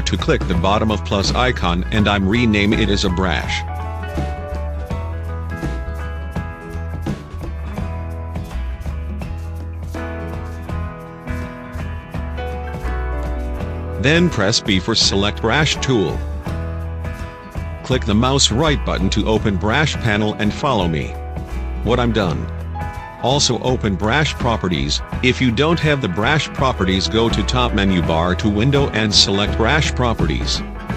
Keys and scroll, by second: 4.4-6.5 typing, 7.1 Return, 10.0 v, 13.9 b.